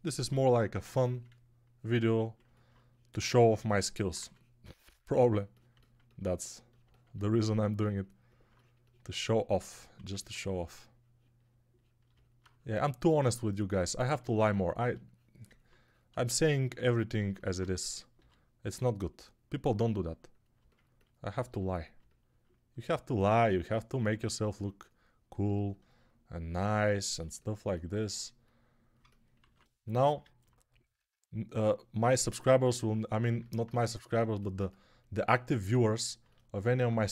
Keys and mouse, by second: 0.2 [, 0.7 [, 4.1 2, 9.9 1, 18.1 g, 29.4 alt+q, 33.2-37.1 alt+drag, 33.2-37.1 alt+middle drag, 33.2-37.1 alt+right drag.